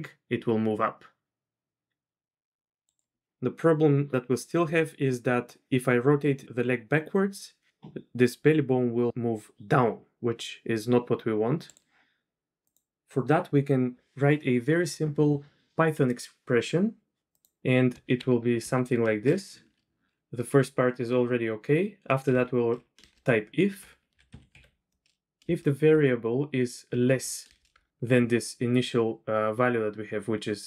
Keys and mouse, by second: 3.2 r, 4.6 r, 12.6 click, 17.3-30.6 drag.